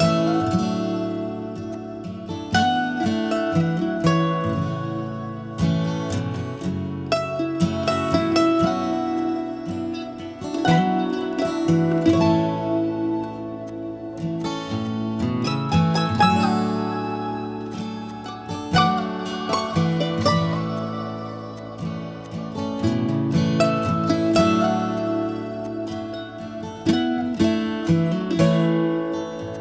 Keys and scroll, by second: 2.1 2, 2.2 Return, 25.9-26.8 typing, 28.3-29.0 typing.